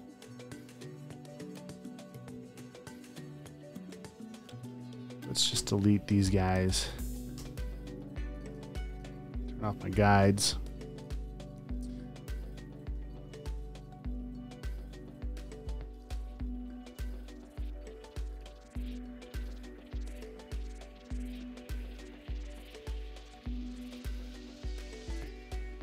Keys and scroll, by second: 1.7 space, 2.4 v, 2.9 space, 5.6 BackSpace, 7.6 space, 8.3 alt+super+space, 8.9 space, 10.1 super+;, 10.3 space, 11.1 space, 21.3 x.